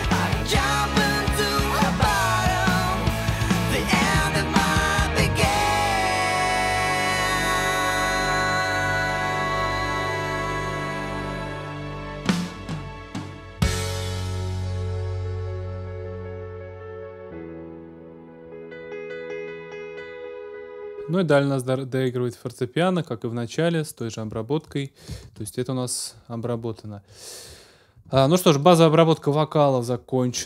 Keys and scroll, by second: 2.9 super+s, 9.0 super+s, 12.9 super+s, 20.6 space, 25.2 super+s.